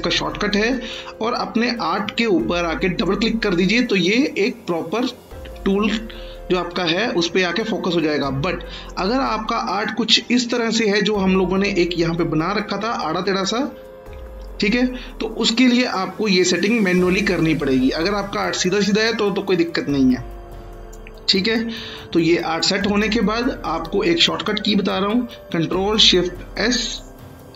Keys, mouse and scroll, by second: 2.9 click, 8.8 click, 10.3-11.0 scroll up 2, 11.0-11.4 scroll up 2, 11.4-12.1 alt+scroll down 2, 12.1-12.9 scroll up 3, 12.9-13.7 scroll down 1, 13.7-15.9 alt+scroll down 2, 15.9 click, 17.7-19.9 click, 21.3-22.8 scroll down 1, 22.8 click, 26.3 ctrl+shift+click, 26.4 ctrl+shift+s.